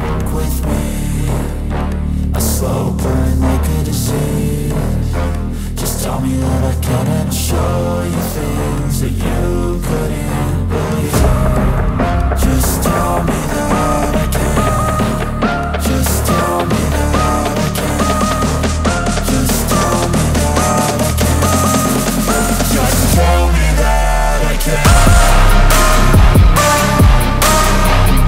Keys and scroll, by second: 9.1 Escape, 11.0 F4, 12.1 Escape, 21.2 F2, 27.0 alt+c, 27.3 p.